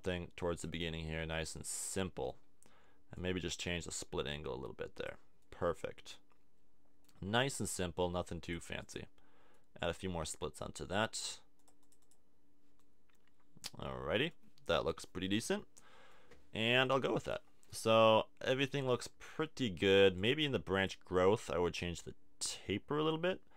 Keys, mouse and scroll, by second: 1.7-3.2 middle drag, 5.4-6.7 middle drag, 13.6-20.2 middle drag, 20.2 click.